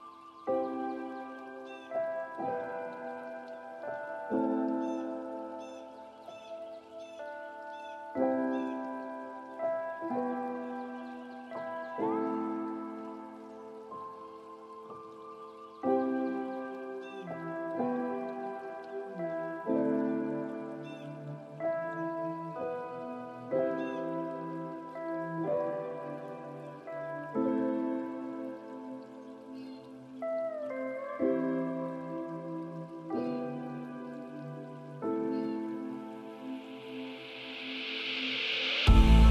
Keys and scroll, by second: 27.8 ctrl+space.